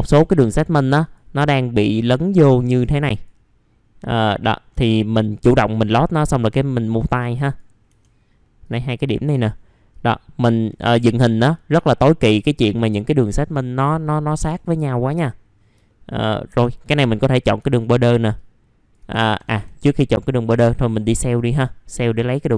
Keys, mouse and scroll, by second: 1.0 ctrl+click, 2.2 ctrl+click, 2.9-4.2 drag, 4.7 w, 5.3-7.9 drag, 7.9 1, 8.6 click, 9.9 ctrl+click, 11.5 click, 12.9 scroll down 1, 14.5 alt+middle click, 15.3 middle click, 15.6 scroll down 1, 15.8 alt+middle click, 16.3 scroll up 3, 16.8 click, 17.3 scroll up 1, 18.3 click, 21.3 click.